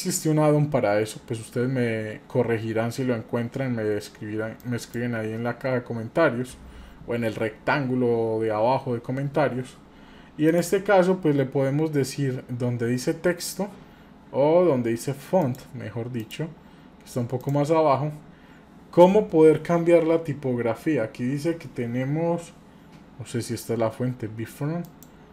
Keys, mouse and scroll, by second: 4.6-10.6 drag, 15.4 click, 16.2 click, 17.4 click, 24.8-25.3 drag.